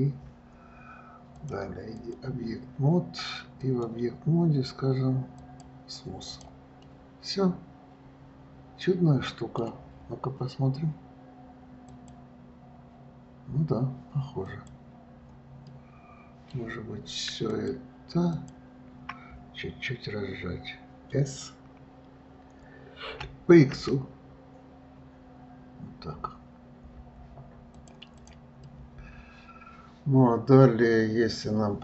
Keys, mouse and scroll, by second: 1.6-3.9 drag, 5.9-6.5 right drag, 6.5 click, 7.1-10.1 middle drag, 15.9-17.8 middle drag, 17.8 click, 18.6 shift+click, 23.4 s, 28.4 click, 28.9-31.8 middle drag.